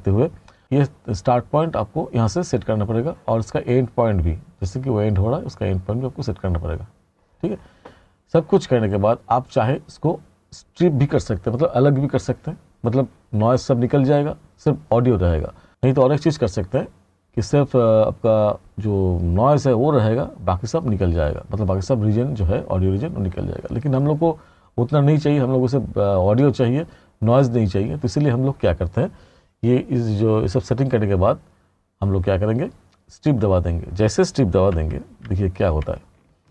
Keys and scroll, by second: 34.8 r.